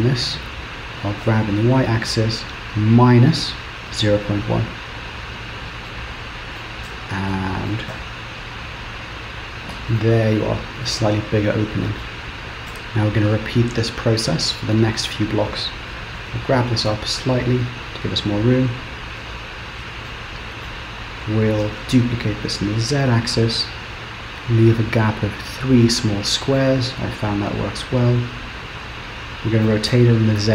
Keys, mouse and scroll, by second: 1.3 g, 6.0 middle click, 7.0 Tab, 7.4 middle click, 8.1 z, 10.0 middle click, 10.0-10.9 scroll down 2, 10.9 middle click, 10.9 scroll down 2, 12.8 KP_3, 13.4-13.9 scroll up 3, 13.9-14.5 scroll down 1, 14.5 click, 14.5-15.7 scroll down 1, 16.0 g, 18.5 click, 18.5-18.9 scroll down 1, 19.1-19.9 scroll up 4, 20.1 shift+middle click, 21.8 shift+d, 25.9 middle click, 27.7-28.9 scroll down 2, 29.1-29.9 scroll down 1, 29.9 r.